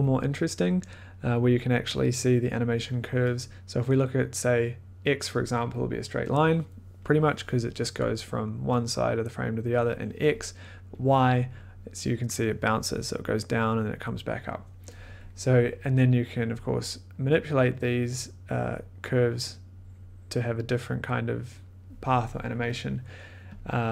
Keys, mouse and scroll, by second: 3.5-5.2 drag, 6.1-9.1 drag, 10.1 click, 11.0-15.3 drag, 15.5 click, 18.1-21.4 drag, 23.5 click.